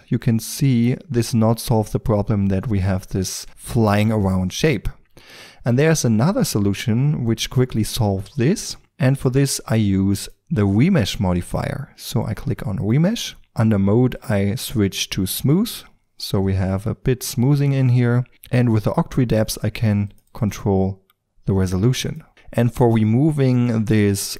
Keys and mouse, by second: 1.7-8.3 middle drag, 5.1 ctrl+z, 10.1-11.9 drag, 11.9-14.1 middle drag, 14.1-17.0 drag, 19.3-23.7 drag.